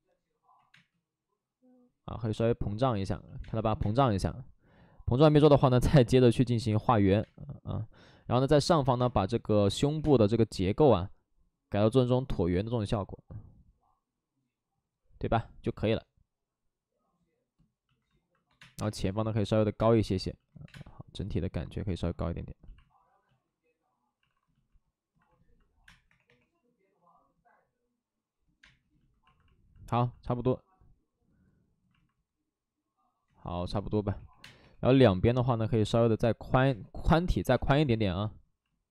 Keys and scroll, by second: 0.5 ctrl+z, 0.6 space, 2.1 ctrl+z, 3.3 space, 3.6 2, 3.7 space, 8.5 alt+s, 8.9 space, 9.9 3, 18.5 space, 18.7 3, 19.7 space, 20.6 space, 21.8 ctrl+z, 24.1 alt+s, 25.7 space, 25.7 3, 26.0 3, 28.5 3, 28.5 space, 31.9 space, 33.2 ctrl+z, 34.0 3, 34.2 3, 34.3 space, 34.5 3, 35.7 ctrl+z, 36.6 space, 37.3 2.